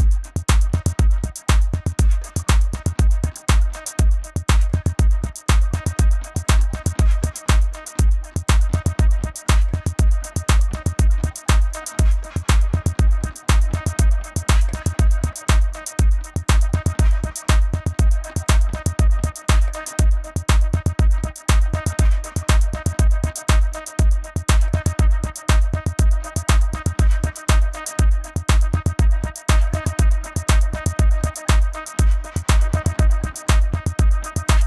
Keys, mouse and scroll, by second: 1.1 a, 1.3 click, 3.5 click, 3.8 v, 4.0 space, 4.1 click, 4.3 v, 4.5 click, 5.9 Up, 6.0 Right, 6.9 click, 7.1 space, 7.2 click, 8.6 click, 13.1 a, 13.4 click, 14.2 Up, 15.6 click, 16.5 click, 16.6 space, 16.8 click, 18.5 click, 20.7 click, 20.9 space, 21.0 click, 21.6 click, 22.1 space, 22.1 click, 22.7 space, 22.8 click, 23.1 space, 23.2 click, 26.0 alt+Tab, 26.9 click, 27.6 click, 28.5 click, 28.8 ctrl+=, 29.1 click, 29.8 Down, 30.0 click, 30.8 click, 30.9-32.6 typing, 31.0 click, 31.3 click, 31.7 click, 31.9 click, 32.2 click, 33.3 right click, 33.9 click.